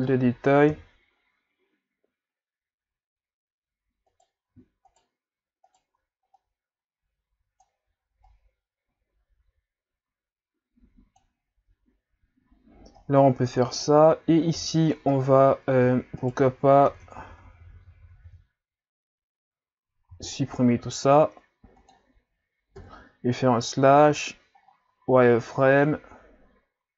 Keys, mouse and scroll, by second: 0.7 KP_3, 4.1 right click, 4.9 shift+right click, 5.7 shift+right click, 6.3-11.5 drag, 13.7 right click, 14.6 KP_Divide, 15.1 Tab, 16.2 alt+right click, 16.9-18.0 KP_Add, 18.3 KP_Add, 20.1 x, 22.8 KP_Divide, 24.0 z, 24.6-25.0 scroll up 5, 25.5-26.1 scroll down 5.